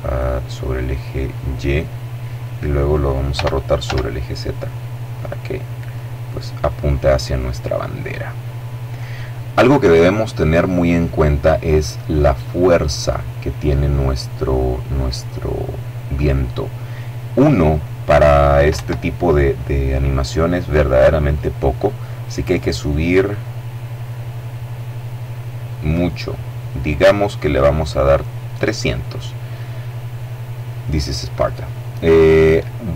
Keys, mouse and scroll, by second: 0.7-2.9 middle drag, 2.9 r, 3.4 z, 4.7 click, 5.1 middle click, 5.7 middle click, 6.5 middle click, 12.8 click, 18.3 Escape, 22.0-24.0 drag, 25.4-27.0 drag.